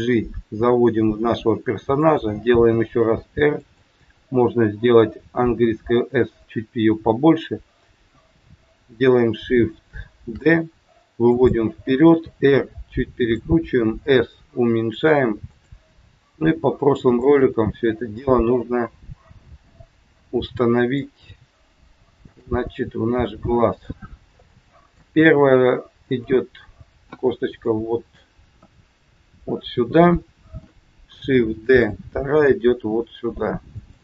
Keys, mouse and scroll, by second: 2.6 r, 5.3 s, 10.3 shift+d, 12.1 r, 14.0 s, 16.4 g, 17.4 middle click, 21.1 g, 22.6 middle click, 24.0 scroll up 2, 24.4 middle click, 25.1 g, 27.6 shift+middle click, 28.6 KP_1, 31.6 shift+d.